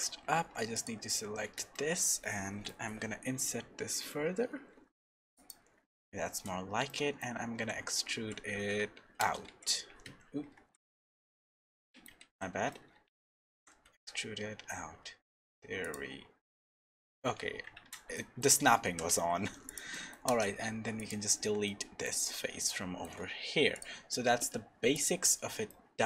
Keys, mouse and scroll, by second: 0.4 3, 0.7 click, 1.7 shift+middle click, 2.3 middle click, 3.3 i, 5.9 shift+middle click, 6.9 middle click, 7.5 e, 9.5 x, 10.5 x, 11.3 middle click, 12.2 ctrl+z, 12.7 middle click, 13.5 e, 16.4 middle click, 17.8 shift+Tab, 18.1 middle click, 18.9 g, 19.9 middle click, 20.3 x, 21.4 Tab, 21.6 middle click, 22.7 shift+middle click, 23.7 click, 25.7 middle click.